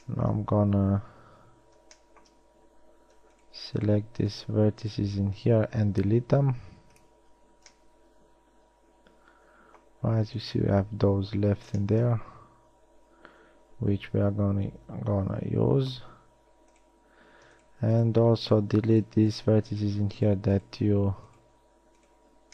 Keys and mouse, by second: 6.0 x, 7.2-8.0 middle drag, 9.8-10.5 middle drag, 16.2 z, 19.2 shift+right click.